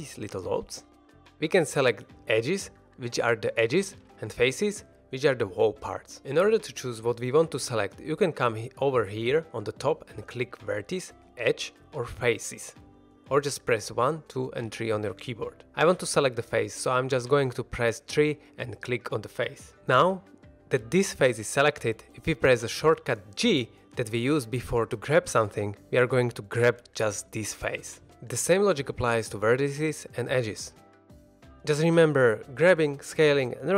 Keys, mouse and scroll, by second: 10.3 click, 11.1 click, 11.8 click, 13.6 1, 13.8 2, 14.1 3, 19.4 click, 20.3 shift+middle drag, 20.5 w, 24.2 g, 27.6 right click, 28.2 1, 28.8 click, 29.3 g, 30.3 right click, 30.8 2, 31.0 click, 31.4 g, 33.4 g.